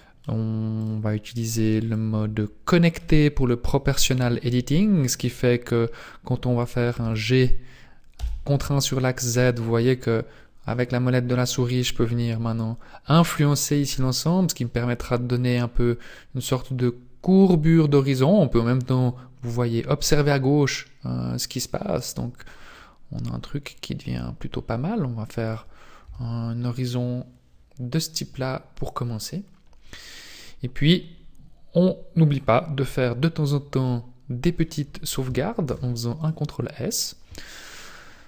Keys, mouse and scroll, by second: 0.8 click, 4.0 scroll down 2, 6.9 g, 26.0 Tab, 33.8 middle click, 35.6 ctrl+s.